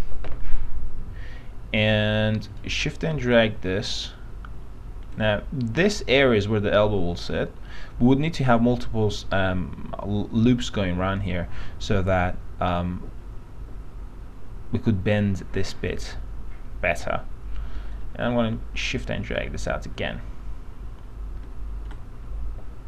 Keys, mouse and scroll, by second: 2.5-5.3 shift+drag, 18.1-19.9 shift+drag, 22.0-22.8 shift+drag.